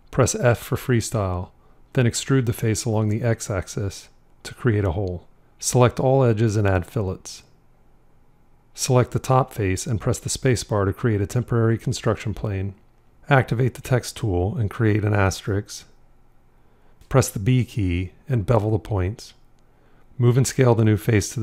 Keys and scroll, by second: 0.8 f, 10.7 space, 13.6 f, 17.8 b.